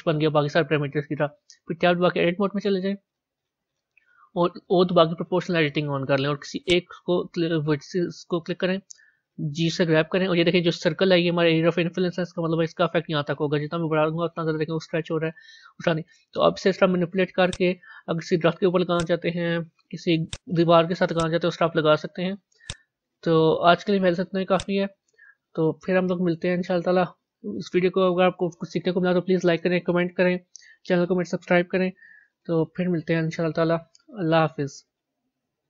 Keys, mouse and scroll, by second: 2.1 Tab, 5.1 o, 6.6 click, 7.1-8.0 scroll down 2, 8.0-9.7 middle drag, 9.7 g, 18.8 click, 19.2 g, 21.1 click, 22.0 g, 23.8 z, 26.2 Tab.